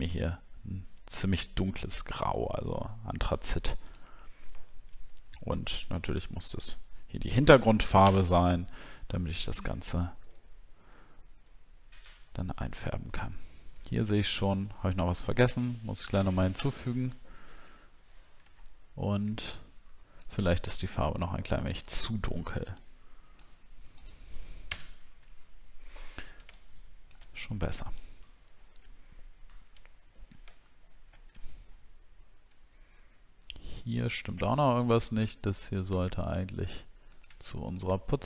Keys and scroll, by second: 8.0 ctrl+BackSpace, 10.4 alt+scroll down 1, 12.1 alt+scroll up 1, 12.8 alt+scroll up 1, 14.9 alt+scroll down 1, 16.8 alt+scroll up 6, 18.5 alt+scroll down 1, 24.7 ctrl+BackSpace, 31.5-31.8 alt+scroll up 2, 33.9 alt+scroll up 1.